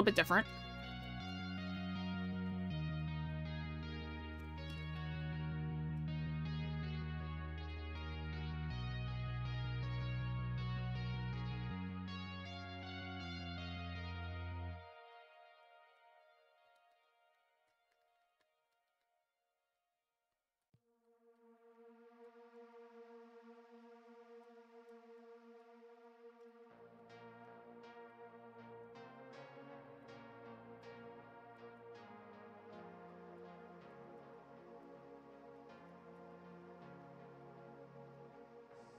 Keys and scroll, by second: 0.6 scroll.